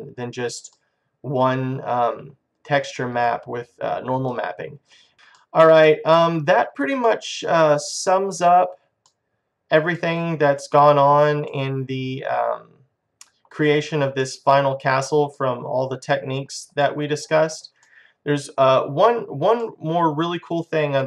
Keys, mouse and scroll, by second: 0.2 middle click, 3.6 middle click, 5.5 middle click, 8.3 middle click, 9.1-10.3 middle drag, 10.6 middle click, 11.1 middle click, 12.5 middle click, 14.3-15.9 middle drag, 19.2 middle click, 20.1-21.0 middle drag.